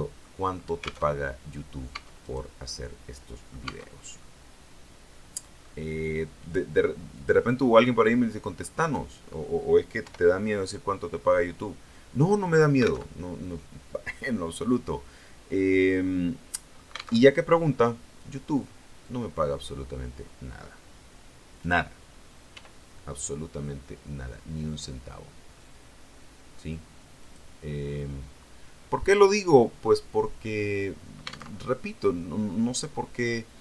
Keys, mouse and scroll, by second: 1.0 alt+Tab, 1.8 Tab, 2.1 right click, 2.6-3.6 middle drag, 3.5 Tab, 4.1-5.7 middle drag, 7.0 click, 8.6 right click, 9.9 i, 12.3 click, 13.0 alt+Tab, 15.8-17.1 middle drag, 17.1 alt+Tab, 17.5-21.8 middle drag, 22.4 e, 27.1 click, 27.8-29.9 middle drag, 31.4 alt+Tab.